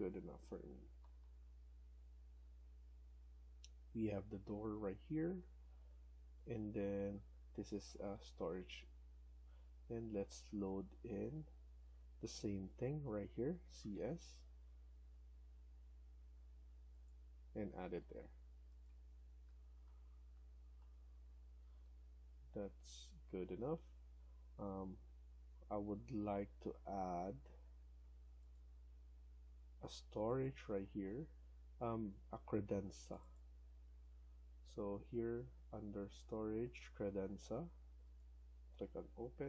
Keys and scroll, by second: 0.6 Left, 1.0 Down, 1.1 Down, 1.8 Left, 2.8 Escape, 3.0 Escape, 12.0 Escape, 13.4-14.1 typing, 17.6 Escape, 18.0 Escape, 18.1 Escape, 19.3 Down, 19.5 Down, 19.7 Right, 20.3 Left, 20.6 Right, 21.3 Escape, 21.5 Escape, 21.7 Escape.